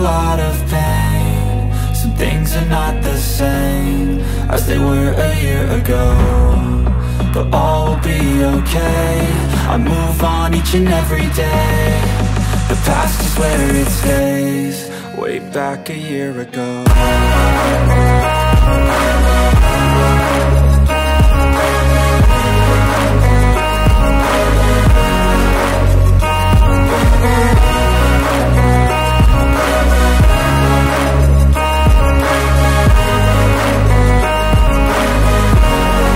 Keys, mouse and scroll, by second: 5.0 click, 8.6 alt+scroll down 1, 8.8 space, 8.9 click, 9.2 space, 11.0 click, 11.7 right click, 12.4 click, 15.6 click, 18.3 space, 18.4 click, 18.7 space, 22.5 alt+scroll up 1, 25.6 alt+scroll up 1, 26.1 shift+y, 28.8 shift+y, 31.2 shift+o, 32.2 shift+r, 33.7 shift+space, 35.0-36.1 typing.